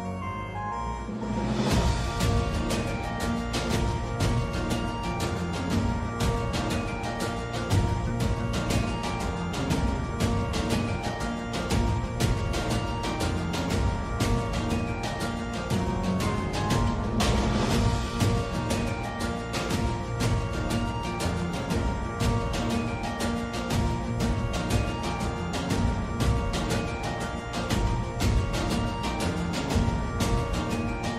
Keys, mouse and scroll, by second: 0.7 alt+q, 2.4 click, 3.3-6.0 alt+drag, 7.4 alt+click, 8.4 3, 10.1-11.3 alt+drag, 12.1 alt+f, 13.9-15.9 alt+drag, 16.1 2, 16.7 click, 17.4-19.1 alt+drag, 18.2 typing, 19.5 alt+f, 20.0-21.9 alt+drag, 22.2 ctrl+z, 22.6-24.1 alt+drag, 27.0 alt+d.